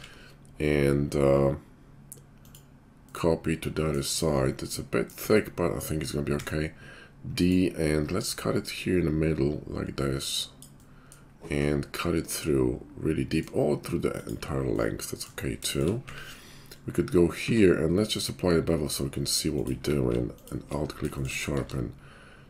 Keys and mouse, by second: 2.4 click, 2.5-8.7 middle drag, 5.2 `, 6.2 d, 8.7-19.7 drag, 16.0 `, 17.4 q, 19.7-22.4 middle drag, 19.7 q, 21.6 q.